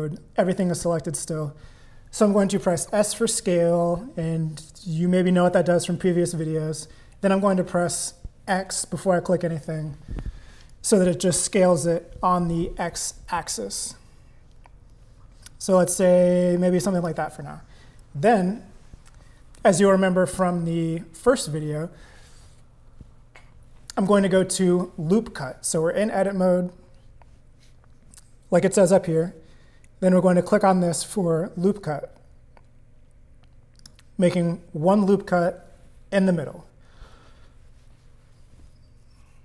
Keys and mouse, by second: 0.2 click, 2.8 s, 31.1 click, 33.9 click.